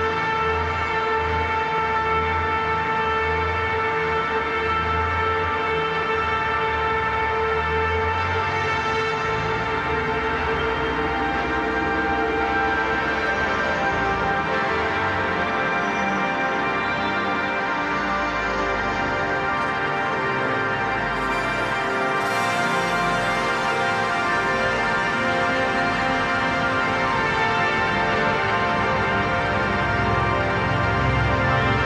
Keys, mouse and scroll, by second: 0.8 click, 1.9 right click, 2.8 click, 4.4 right click, 5.1 click, 8.3 ctrl+=, 10.1-12.1 typing, 12.7 click, 14.2-15.6 typing, 15.8 click, 18.7 Right, 19.8 Return, 20.6-27.2 drag, 27.2 click, 28.1 ctrl+a, 28.7-31.5 typing, 29.1 Caps_Lock.